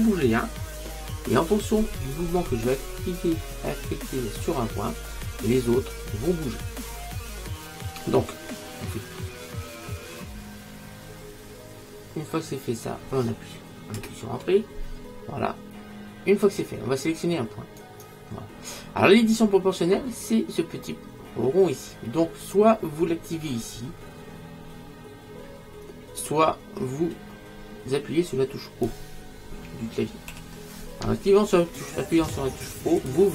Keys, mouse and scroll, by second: 14.0 Return, 17.9-19.6 right drag, 22.5 click, 30.5 o, 33.1 click.